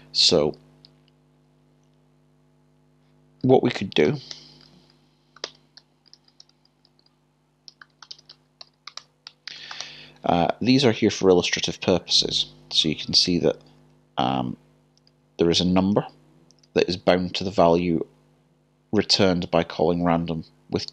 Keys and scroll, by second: 0.9-2.1 typing, 5.1-5.9 typing, 7.4-8.2 typing, 11.2-11.7 typing, 13.3 typing, 14.8-15.9 typing, 19.6-20.0 typing.